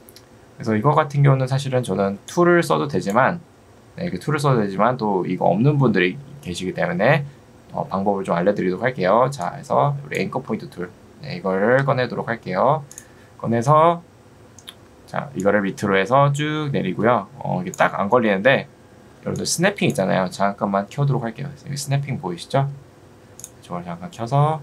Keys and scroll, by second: 4.1 Escape, 11.9 Escape, 22.5 Escape.